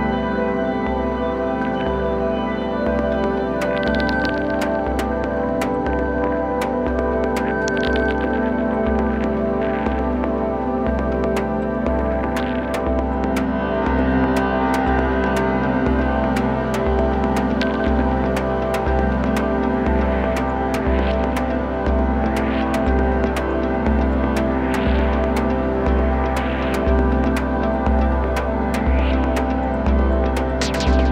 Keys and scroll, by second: 12.5 super+z, 14.5 super+z.